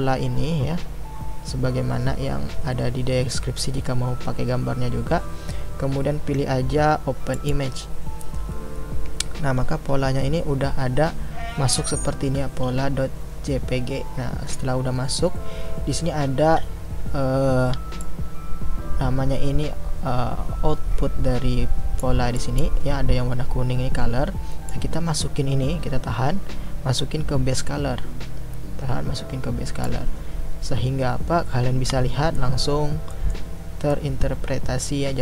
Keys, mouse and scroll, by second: 18.0-22.0 drag, 24.7-29.9 drag, 32.3-35.2 middle drag.